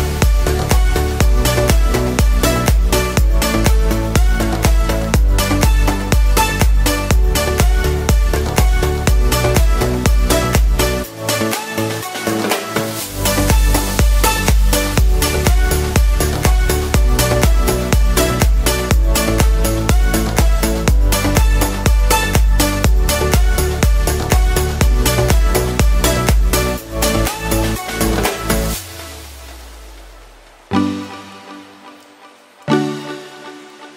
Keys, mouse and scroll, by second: 1.5 click, 3.4 middle click, 4.6 click, 6.3 middle click, 8.3-8.8 scroll down 3, 8.6 middle click, 9.1 shift+middle click, 9.4 scroll up 1, 11.2 shift+a, 14.7 click, 16.2 click, 16.9 middle click, 17.9 shift+middle click, 21.6 click, 22.3-23.5 scroll up 1, 23.5 click, 23.5 middle click, 24.3 middle click, 25.0-25.6 scroll down 4, 25.3 middle click, 26.5 shift+middle click, 27.2 middle click, 28.5 middle click, 28.6 shift+middle click, 29.7 click, 31.4-32.2 scroll down 3, 31.6 middle click, 32.4-32.8 scroll up 5, 32.8 shift+middle click.